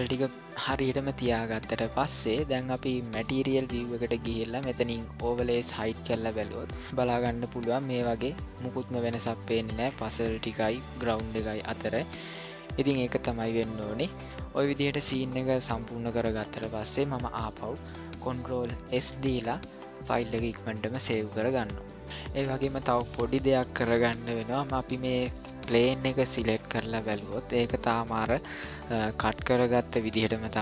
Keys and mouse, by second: 0.0-0.3 ctrl+middle drag, 0.4 middle click, 1.5 shift+middle click, 3.1 click, 5.7 click, 8.2-11.6 middle drag, 13.8 click, 14.6 click, 15.8-16.8 middle drag, 19.0 ctrl+s, 25.6 click.